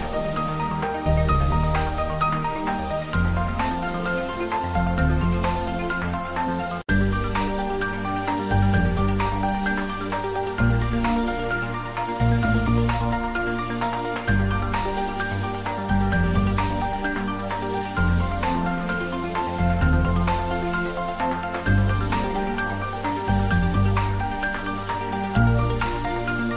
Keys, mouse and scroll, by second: 0.1 click, 1.9 middle click, 3.0 ctrl+3, 3.3-6.1 middle drag, 6.1 ctrl+middle click, 6.6 shift+middle click, 7.5 Tab, 8.8 ctrl+Tab, 8.9 ctrl+middle click, 11.5 s, 12.8 click, 12.9 Tab, 13.5-16.6 ctrl+middle drag, 16.6 click, 18.7 g, 20.8 click, 24.1 z, 24.7 click, 25.8 shift+z.